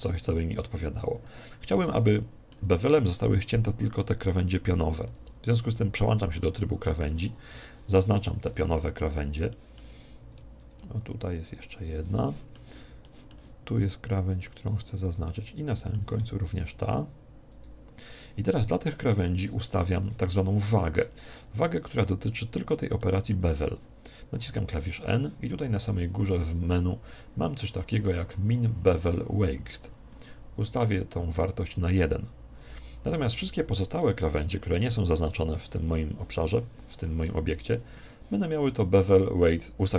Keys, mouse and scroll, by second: 0.7-3.5 middle drag, 5.0 ctrl+Tab, 6.7 right click, 7.5-11.3 middle drag, 11.3 right click, 12.1-14.6 middle drag, 14.6 right click, 15.2-16.9 middle drag, 17.5 right click, 18.5-24.6 middle drag, 24.3 n, 30.1 click, 33.9-35.6 middle drag.